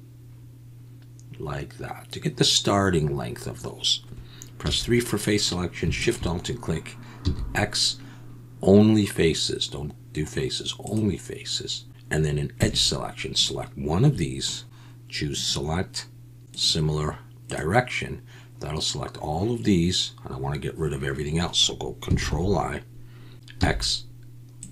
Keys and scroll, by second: 4.6 3, 7.2 x, 12.6 2, 22.2 ctrl+i, 23.6 x.